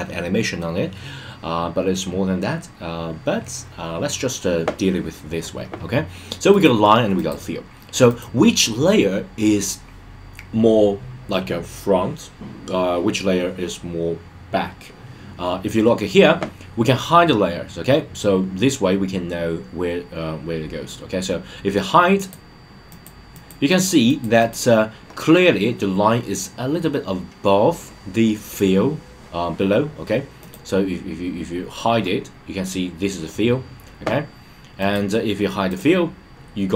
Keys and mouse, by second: 6.5 click, 7.1 click, 8.1 click, 22.1 click, 22.9 click, 23.3 click, 23.7 click, 24.0 click, 24.4 click, 30.4 click, 35.7 click.